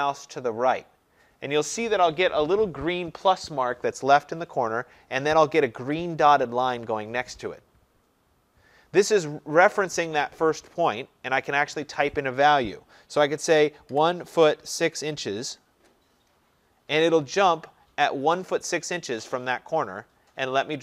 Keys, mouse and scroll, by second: 13.7-16.2 typing, 16.9 Return.